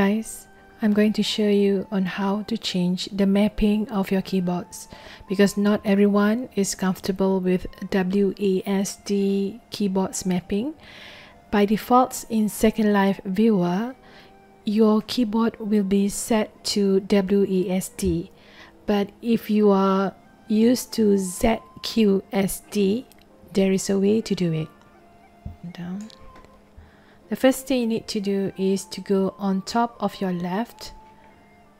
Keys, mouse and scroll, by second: 25.6 click.